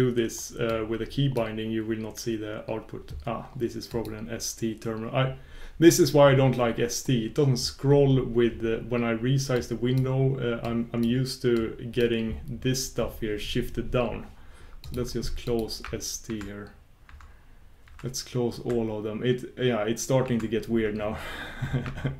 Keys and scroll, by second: 16.3 shift+super+q, 17.1 shift+super+q, 21.9 shift+super+q.